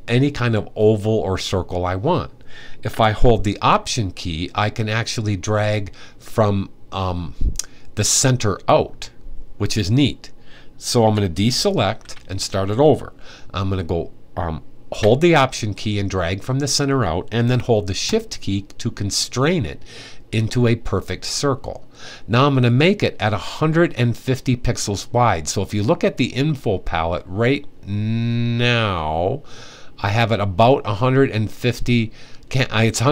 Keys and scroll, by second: 11.5 super+d, 14.7 super+d.